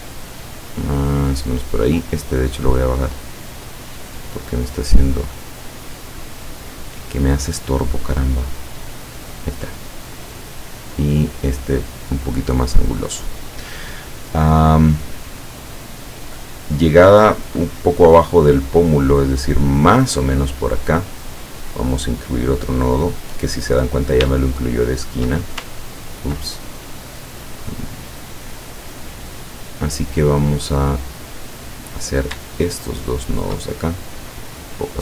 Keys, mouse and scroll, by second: 2.6-4.1 drag, 4.4-6.2 drag, 6.8-7.9 drag, 10.2-12.6 drag, 21.6 click, 24.5 shift+click, 25.8-26.2 ctrl+scroll down 1, 26.5 ctrl+click, 31.4 click, 32.0 click, 33.3 shift+click, 34.0-35.0 shift+drag.